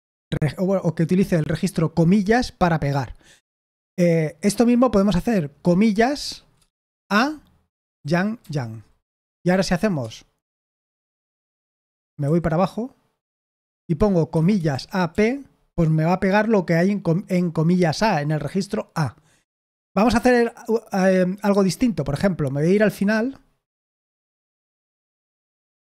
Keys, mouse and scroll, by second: 6.7-8.3 typing, 12.2 j, 14.8-15.5 typing.